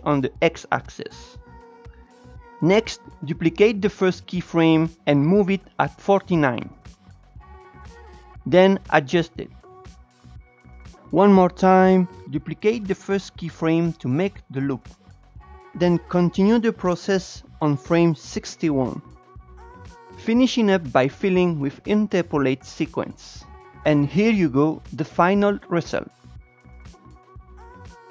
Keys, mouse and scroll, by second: 4.1-4.4 drag, 5.0 shift+d, 7.8 click, 8.6 g, 9.5 click, 10.4 g, 11.0 shift+right click, 11.2 s, 12.2 click, 12.8 shift+d, 14.9 click, 15.6 g, 17.2 shift+Right, 17.5 s, 19.5 click, 20.3 ctrl+shift+e, 20.9 click, 21.1 ctrl+shift+e, 21.7 click, 22.0 ctrl+shift+e, 22.5 Tab, 23.5-26.0 drag, 26.9-28.1 drag.